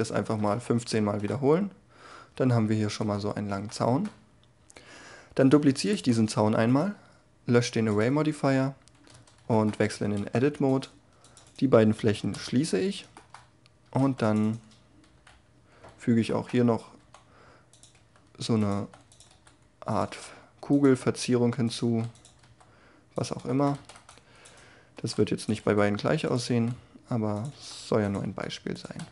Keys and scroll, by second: 5.4 shift+d, 9.1 Tab, 9.8 a, 10.2 c, 12.3 f, 13.8 a, 14.0 c, 15.1 3, 16.9-22.4 typing, 23.7 a, 23.8 c, 24.9 e, 25.6 s, 26.4 e, 27.5-29.1 typing.